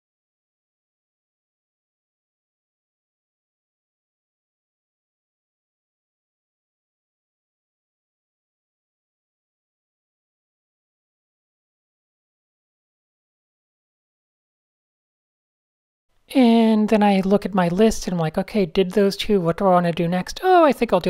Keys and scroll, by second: 1.3 shift+super+a, 1.4 super+0, 1.7 Tab, 3.8 super+space, 4.1 super+a, 4.6 super+space, 5.4 alt+super+a, 5.5 Tab, 5.9 x, 6.2 shift+super+a, 6.3 Tab, 6.6 super+0, 7.7 super+space, 8.2 Tab, 9.2 Tab, 9.2-10.7 typing, 11.0 super+0, 13.3 Tab, 15.3 Tab, 15.7 Tab, 15.9-17.1 typing, 17.3 super+z.